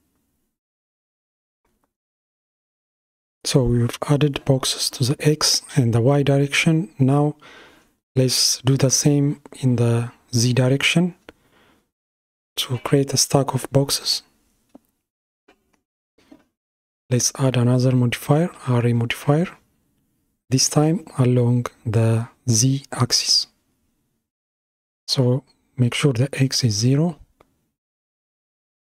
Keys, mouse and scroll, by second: 9.9-12.9 middle drag, 16.2-16.6 scroll up 4, 18.9-19.9 drag, 19.9-22.2 scroll down 14, 22.2-23.6 scroll down 1, 23.6-26.8 drag, 27.1-28.8 drag.